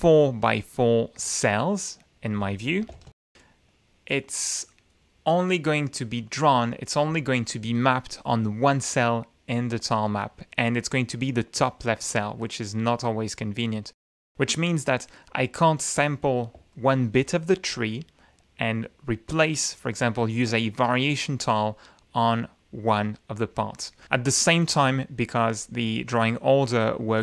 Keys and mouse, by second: 2.9 ctrl+=, 4.3 click, 16.7 ctrl+click, 25.7 click, 26.6 click, 27.1-27.2 middle drag.